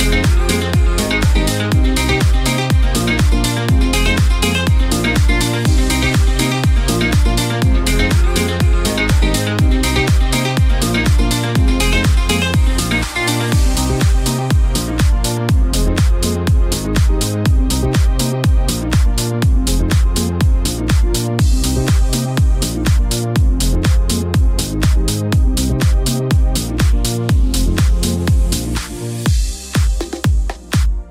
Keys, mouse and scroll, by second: 0.9 n, 1.2 space, 17.4 space.